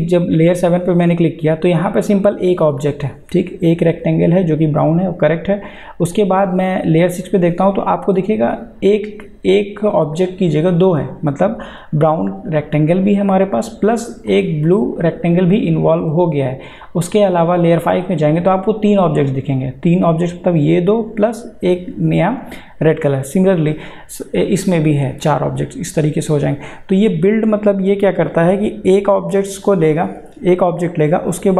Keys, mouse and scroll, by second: 0.2 click, 6.1 click, 12.6 click, 18.9 click, 25.1 click, 29.2 click.